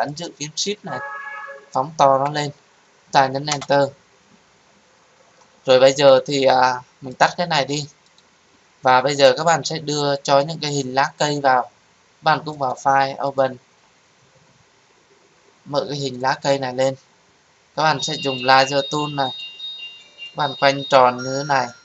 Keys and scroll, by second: 3.5 Return, 6.6 Return.